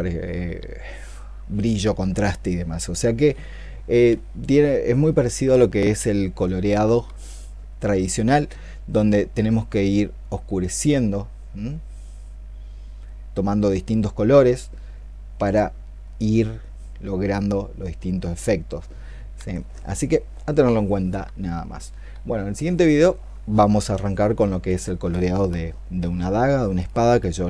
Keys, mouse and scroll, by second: 15.9 double click, 16.9 double click, 17.8 double click, 18.0 double click, 18.3 double click.